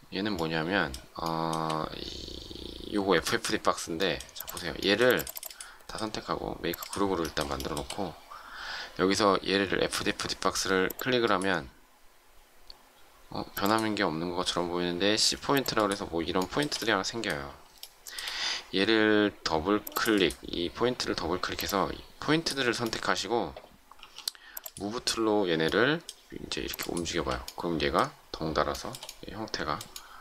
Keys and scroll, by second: 24.0 m.